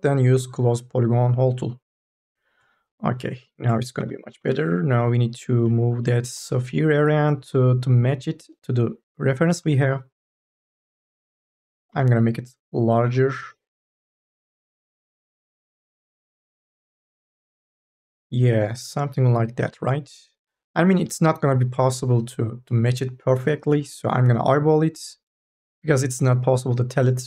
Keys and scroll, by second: 4.1 4, 4.4 e, 6.2 e, 11.7 t, 12.9 e.